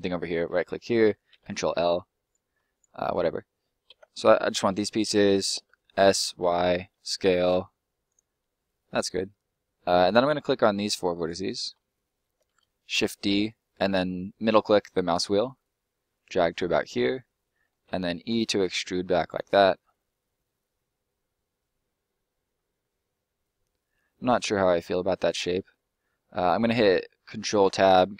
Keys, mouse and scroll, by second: 0.3 right click, 0.9 ctrl+right click, 1.3 ctrl+l, 2.2 right click, 2.6 ctrl+right click, 3.9 ctrl+l, 4.5 middle click, 5.5 s, 6.2 y, 8.1 click, 8.3 middle click, 10.1 right click, 11.7 middle click, 12.4 shift+d, 14.5 middle click, 16.4 click, 16.7 middle click, 17.8 e, 19.3 click, 19.5 middle click, 25.5-26.1 scroll up 2, 27.7-28.1 ctrl+scroll up 1.